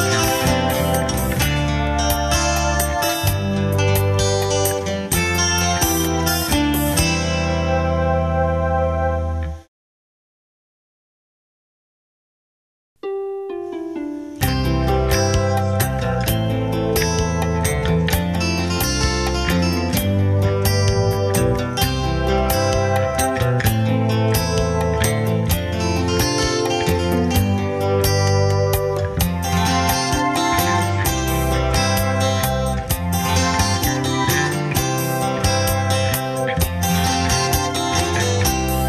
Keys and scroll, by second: 37.0 ctrl+z.